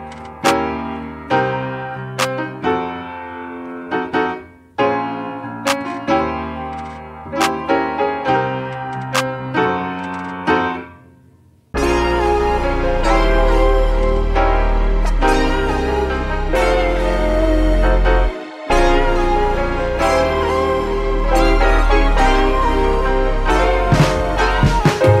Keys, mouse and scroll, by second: 1.2-3.7 drag, 8.7-10.1 scroll down 10, 17.5-18.7 scroll down 9, 18.7 ctrl+w, 19.2 shift+click, 20.7 shift+c, 21.3-25.2 middle drag.